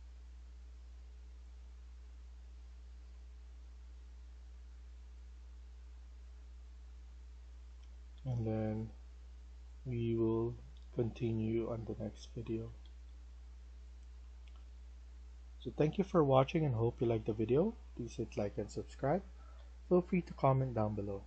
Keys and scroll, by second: 0.0-0.1 typing, 2.6-3.3 typing, 6.3-8.0 typing, 12.3-13.3 typing, 15.3 a, 15.8 s, 18.0-21.0 typing.